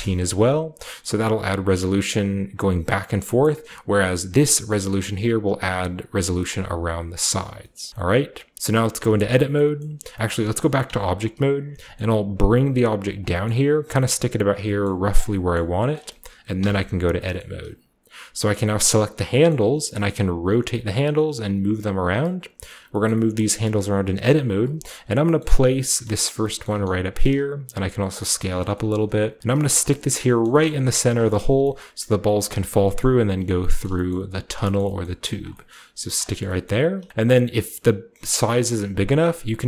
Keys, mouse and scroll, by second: 2.1-3.3 middle drag, 3.3-4.9 scroll down 1, 4.3 click, 4.3 typing, 7.2 scroll down 1, 8.5 shift+middle click, 9.5 typing, 10.8 shift+Tab, 12.0-12.7 typing, 13.1-17.1 shift+drag, 13.5-15.2 shift+scroll up 1, 13.8 shift+middle click, 13.9 g, 14.8 middle click, 14.8 g, 15.0 middle click, 15.5 Tab, 15.7 middle drag, 16.0-18.8 shift+scroll up 1, 16.5 Tab, 17.3-18.8 shift+drag, 19.1 right click, 19.1-21.1 scroll down 1, 19.4-21.2 middle drag, 19.4 typing, 21.2 click, 21.3 typing, 21.9 middle click, 22.0 click, 22.6 shift+middle click, 22.8 shift+click, 23.0 shift+middle click, 23.1 shift+click, 23.4-24.5 typing, 23.6 click, 24.1 click, 24.4 click, 24.9 click, 25.1-28.4 scroll up 1, 25.3-26.3 middle drag, 25.6 r, 25.9 click, 26.6 middle click, 26.8-27.6 typing, 27.2 middle click, 28.4 shift+middle click, 28.8-30.7 middle drag, 29.4 typing, 30.7 typing, 31.0 shift+middle click, 31.1-32.8 shift+drag, 33.0 middle click, 33.8 shift+middle click, 34.0 middle click, 34.2-37.1 typing, 34.4 click, 34.7 middle click, 35.0 middle click, 35.7 middle click, 36.4 middle click, 36.5-38.4 scroll up 1, 37.1-38.4 shift+drag, 38.4 scroll up 1, 38.6-39.6 middle drag.